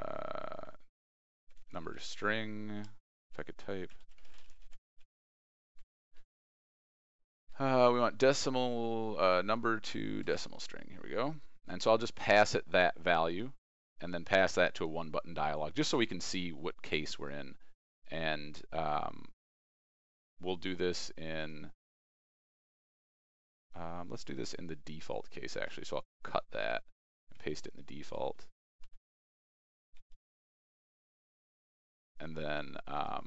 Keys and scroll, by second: 25.6 ctrl+x, 27.3 ctrl+v, 28.7 ctrl+z, 29.9 ctrl+v.